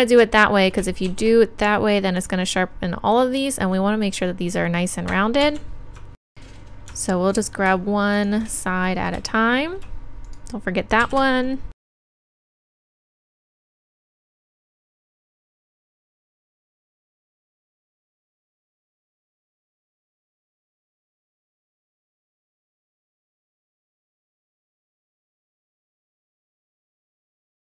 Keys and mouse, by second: 1.1 shift+e, 2.2-5.4 drag, 5.4 ctrl+z, 11.0 shift+e, 12.4 shift+e, 13.1 right click, 13.3 shift+e, 15.4-17.0 typing, 19.6 shift+e, 20.2 click, 20.4 right click, 20.5 shift+e, 20.9 click, 21.2 right click, 21.4 shift+e, 22.1 click, 22.4 ctrl+r, 23.1 ctrl+z, 23.7 shift+e, 24.0 click, 24.4 middle click, 24.8 right click, 24.9 click, 25.4-27.7 typing, 25.6 right click, 26.2 right click, 26.5 right click.